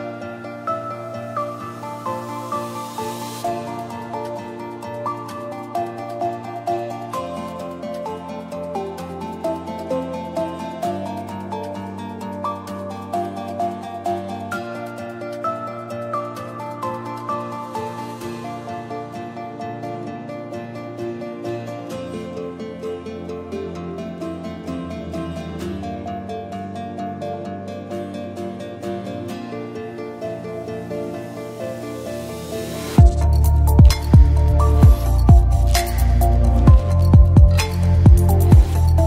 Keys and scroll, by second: 7.0-8.8 typing, 12.1-13.0 typing, 22.0 x, 30.0-31.7 typing.